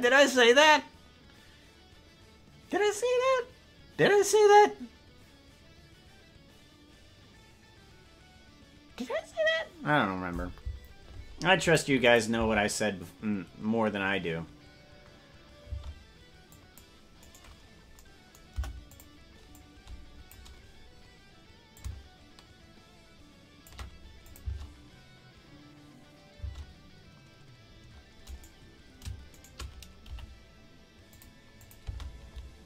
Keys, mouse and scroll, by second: 11.7 click, 12.1 click, 12.4 space, 15.8 space, 16.6 click, 17.2 right click, 18.5 Delete, 19.6 click, 21.7-23.7 drag, 24.3-26.4 drag, 24.5 space, 26.5 space, 28.3 right click, 29.4 shift+right click, 30.0 g, 31.7-32.6 drag, 31.8 space.